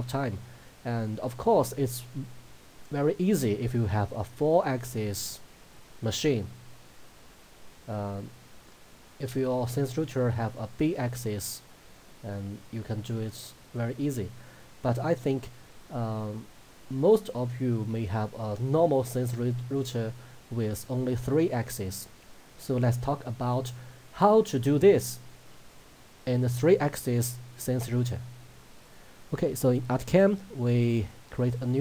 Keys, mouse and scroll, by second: 28.9 click.